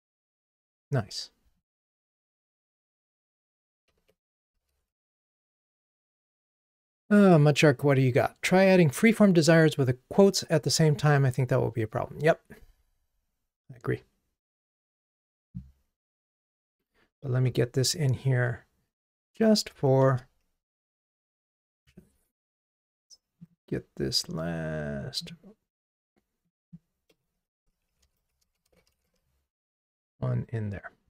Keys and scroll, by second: 4.6 ctrl+r, 17.2 super+k, 23.6 ctrl+m.